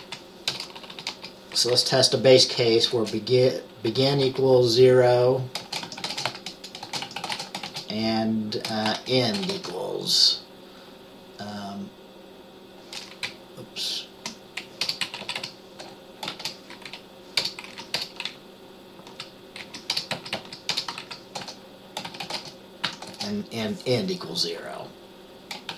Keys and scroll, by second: 0.0-1.8 typing, 3.0 typing, 4.1-9.8 typing, 13.4 Left, 13.9-14.9 Left, 14.9 BackSpace, 15.1 Right, 15.3 Right, 15.5 Right, 16.4 shift+', 17.0 Left, 17.5 BackSpace, 17.8 Left, 18.1 BackSpace, 18.4-19.1 Right, 19.7 Left, 20.0-23.2 typing, 20.2 Right, 20.5 Right, 25.6-25.7 typing.